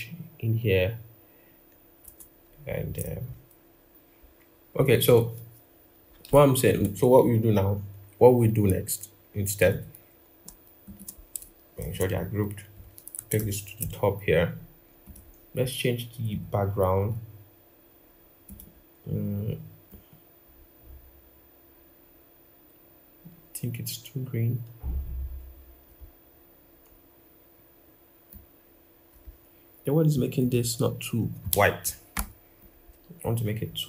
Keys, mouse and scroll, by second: 4.1-6.2 scroll down 1, 10.6 shift+click, 11.6 ctrl+g, 13.2 ctrl+].